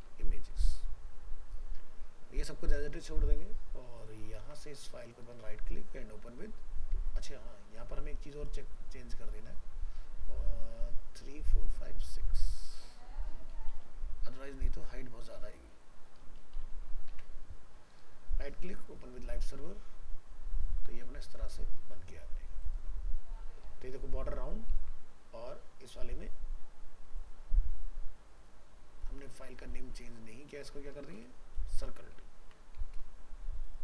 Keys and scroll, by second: 2.9 ctrl+s, 16.7 ctrl+s, 17.2 alt+Tab, 21.1 ctrl+w, 24.7 ctrl+w, 31.0 ctrl+shift+Left, 32.4 ctrl+z.